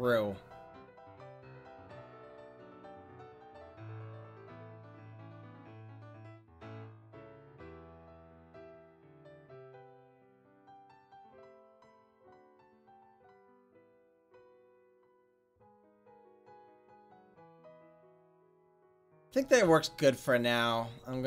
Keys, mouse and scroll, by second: 0.2-3.0 middle drag, 3.0 click, 6.6-7.6 drag, 7.6 middle click, 10.5-12.1 middle drag, 12.1 r, 21.1 a.